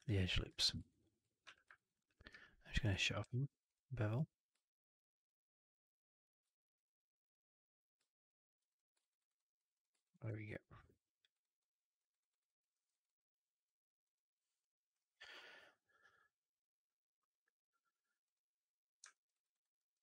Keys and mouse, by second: 0.5 shift+x, 0.8 alt+right click, 0.9 alt+click, 1.3 4, 1.6 alt+right drag, 1.8 alt+drag, 2.2 q, 3.1 q, 8.9 alt+right drag, 9.1 alt+right drag, 9.2 alt+drag, 9.6 click, 9.8 alt+right drag, 10.0 alt+right drag, 10.1-11.1 alt+drag, 11.2 alt+right click, 11.5-11.9 alt+drag, 12.0 alt+right drag, 12.2 alt+right drag, 12.3 alt+drag, 12.6 alt+middle drag, 12.8 alt+right drag, 12.9-13.5 alt+drag, 13.9 alt+click, 19.0 alt+middle click, 19.2 alt+right click, 19.4 alt+right click, 19.7 alt+middle drag, 19.9 alt+right drag.